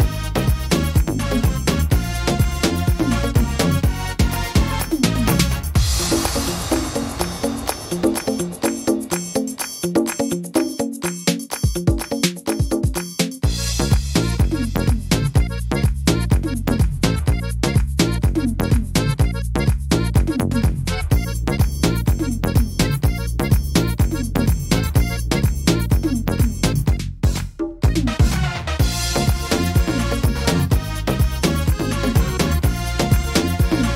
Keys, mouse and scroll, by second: 10.3-10.7 scroll down 4, 11.2 middle click, 11.2 scroll down 2, 11.7 shift+middle click, 12.1-12.7 scroll up 4, 13.7 scroll up 2, 13.7 right click, 14.8 l, 16.1 scroll down 1, 16.1 l, 16.9-18.8 scroll down 3, 16.9 s, 19.1 scroll down 1, 19.4 s, 21.7 click, 24.5 middle click, 24.9 scroll up 3, 25.3 shift+middle click, 25.8 middle click, 26.3 shift+middle click, 26.9 middle click, 27.3 scroll down 2, 27.9 middle click, 29.1 right click, 30.1 l, 31.2 shift+d, 32.3 click.